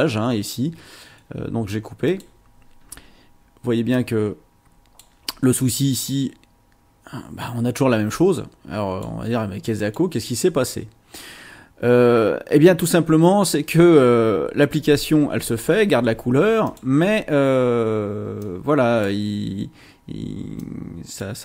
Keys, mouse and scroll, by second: 0.0 click, 2.0 click, 3.9 click, 6.0-9.2 drag, 9.8 click, 16.6 click, 18.4-19.2 drag, 20.6-21.4 drag.